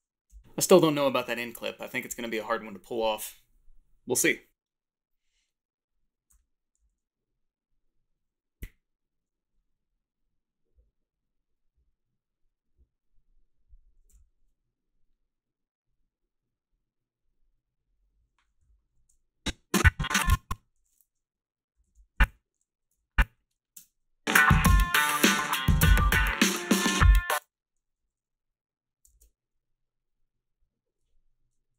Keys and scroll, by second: 6.3 h, 6.8 a, 14.1 f, 21.4 Down, 21.7 i, 22.1 Left, 22.9 b, 23.4 a, 23.7 space, 27.1 space, 28.0 a.